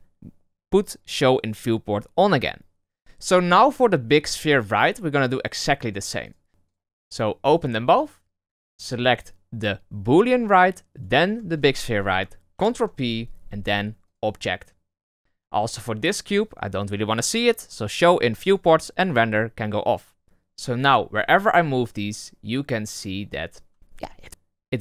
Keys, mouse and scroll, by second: 5.8 click, 6.2 click, 6.6 click, 6.9 click, 7.4 click, 8.7 right click, 10.9 shift+right click, 12.5 ctrl+p, 15.6 right click, 18.4 click, 19.0 click, 20.2 click, 20.7 right click, 21.3 g.